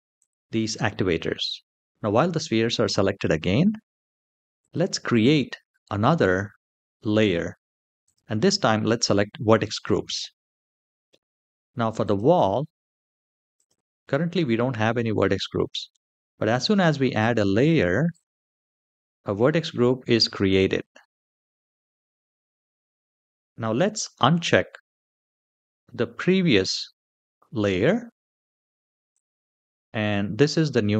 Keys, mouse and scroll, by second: 0.1 typing, 4.4 click, 7.8 click, 11.8 click, 13.3 click, 17.8 click, 28.9 click.